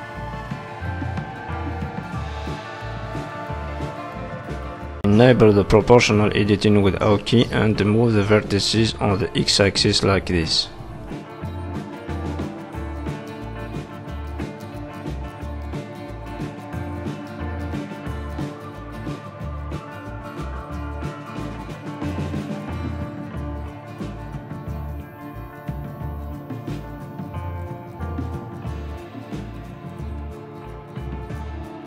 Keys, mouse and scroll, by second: 0.7 click, 1.5 middle click, 1.5-2.0 scroll down 3, 2.0 middle click, 2.9 middle click, 3.2-3.5 scroll up 2, 3.5 shift+middle click, 3.8 middle click, 4.2 shift+middle click, 4.5 scroll up 1, 4.7 middle click, 6.1 click, 6.5 middle click, 7.5 middle click, 7.9 o, 8.7 click, 9.8 click, 11.1 click, 12.1 click, 12.4 middle click, 15.1-15.7 scroll up 1, 15.7 click, 15.7 scroll up 1, 16.1 g, 17.4 click, 17.7 g, 19.0 click, 19.4 g, 20.7 middle click, 21.7 o, 22.1 middle click, 22.7 click, 23.0 g, 24.7 click, 25.4 g, 26.4 click, 26.7 middle click, 28.7 middle click, 29.4 middle click, 29.4-29.8 scroll down 3, 29.7 middle click.